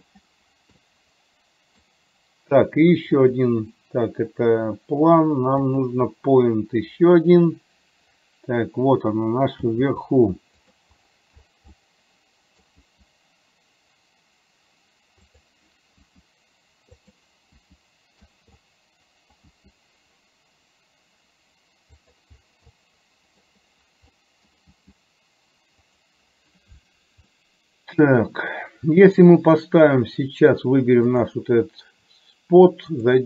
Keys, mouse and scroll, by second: 1.0 middle click, 2.0-2.4 scroll down 1, 3.4 click, 5.7 click, 9.8 g, 11.9 middle click, 14.0 g, 17.7 g, 18.8 middle click, 19.8 g, 22.8 middle click, 24.3 middle click, 25.5 g, 27.4 middle click, 31.3 click.